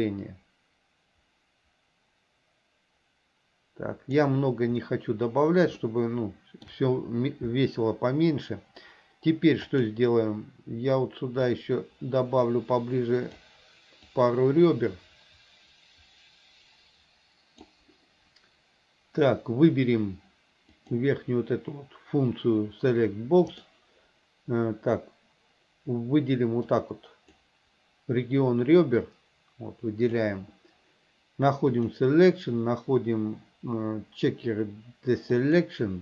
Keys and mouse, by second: 6.0 shift+middle click, 9.8 click, 11.8-13.5 drag, 14.3-17.9 drag, 20.9 click, 26.9 click, 29.2-30.4 drag, 31.8-35.8 drag.